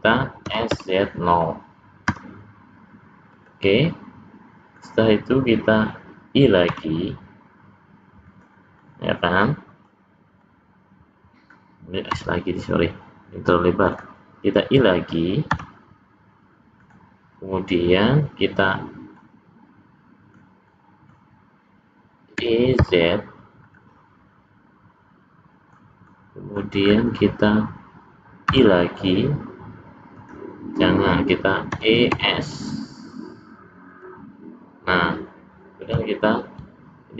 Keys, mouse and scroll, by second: 0.4 s, 3.4 s, 3.8 middle click, 8.3 i, 8.8 middle click, 10.4 middle click, 12.1 s, 16.8 i, 19.1 middle click, 20.7 middle click, 22.3 e, 23.9 middle click, 26.1 middle click, 26.8-27.2 scroll up 4, 28.5 i, 31.7 e.